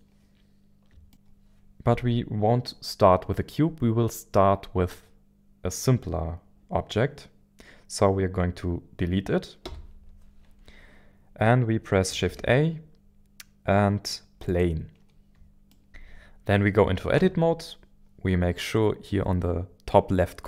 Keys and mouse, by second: 9.6 Delete, 12.2 shift+a, 15.7 shift+middle click, 17.2 Tab.